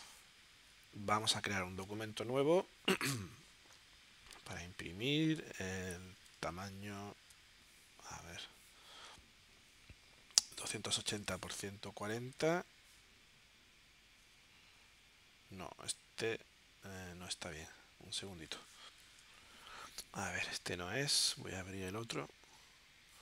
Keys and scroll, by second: 19.4 shift+super+p.